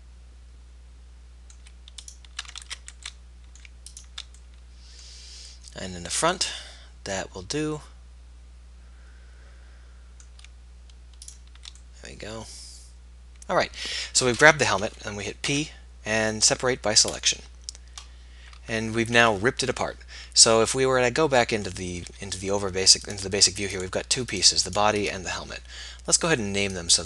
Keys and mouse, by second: 0.0-1.9 middle drag, 2.1 click, 2.7 ctrl+z, 3.5-4.9 middle drag, 5.5 middle click, 11.3 click, 11.9-15.5 middle drag, 15.5 p, 20.6 Tab, 22.0 z, 23.1 middle click.